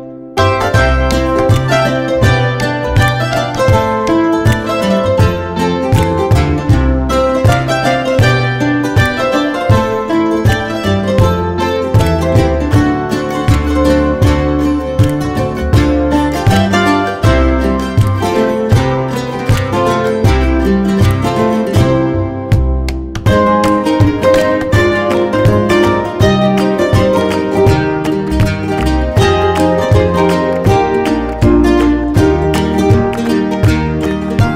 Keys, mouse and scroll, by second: 2.0 click, 2.5 click, 3.1 click, 5.0 middle click, 5.8 middle click, 6.8 click, 7.3 click, 8.6 click, 9.7 click, 10.5 middle click, 10.6 middle click, 12.0 click, 12.7 middle click, 12.9 middle click, 13.6 ctrl+click, 18.7 click, 19.0 middle click, 19.3 middle click, 19.3 scroll down 1, 20.0 middle click, 20.2 scroll down 1, 21.2 scroll up 1, 22.2 scroll up 1, 24.4 middle click, 24.7 scroll up 1, 26.2-26.8 scroll down 1, 27.8 middle click, 30.2 scroll up 1, 30.9-31.5 scroll up 1, 32.0 click, 33.4 click, 34.1 click.